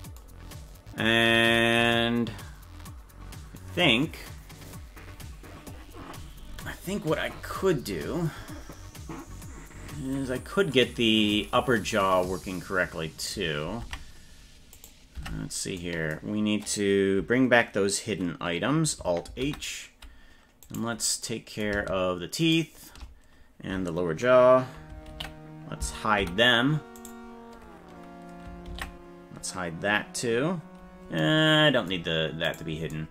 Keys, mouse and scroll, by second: 13.7 ctrl+Tab, 14.8 right click, 15.2 Tab, 19.3 alt+h, 20.6 right click, 22.4 shift+right click, 25.1 ctrl+l, 26.2 h, 27.0 right click, 28.7 ctrl+l, 32.4 right click.